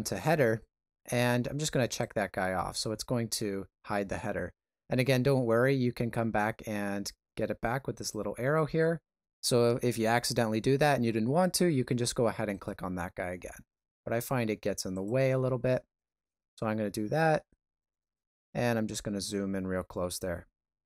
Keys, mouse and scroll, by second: 7.9 click, 12.5 right click, 16.5 shift+middle click, 17.5 ctrl+middle click, 18.6 shift+middle click.